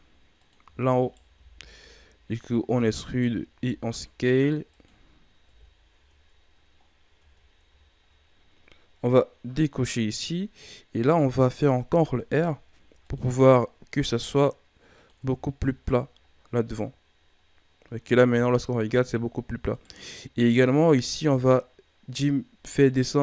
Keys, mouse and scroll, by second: 0.6 e, 1.3 s, 2.6 e, 3.5 s, 5.4 KP_1, 5.9 Tab, 6.8-7.1 scroll up 3, 7.1 Tab, 7.8-9.5 ctrl+scroll up 3, 9.5 click, 11.8 ctrl+r, 15.1 Tab, 15.6-17.4 scroll down 6, 17.4 scroll down 2, 17.6-17.9 scroll up 6, 18.3 Tab, 18.5-19.3 scroll up 3, 19.7 right click, 20.4-22.8 drag, 22.8 right click.